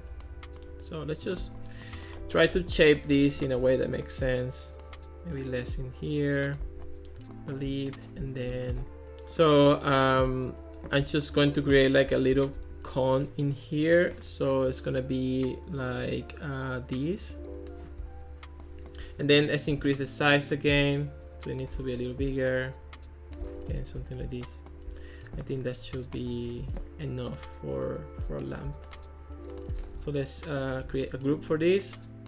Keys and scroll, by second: 19.9 shift+c, 30.8 super+g.